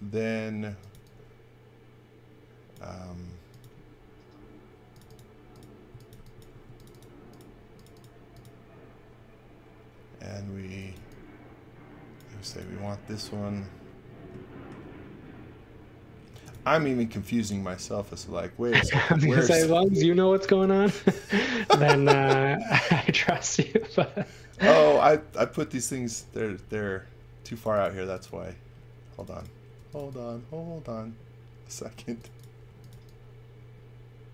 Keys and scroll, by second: 0.6 x, 0.9 v, 3.1 space, 5.6-6.6 typing, 10.6 x, 10.9 v, 12.3 space, 16.0-17.0 typing, 18.9 space, 19.9-23.6 typing, 25.3 space, 29.5-30.4 typing, 32.0-33.4 typing.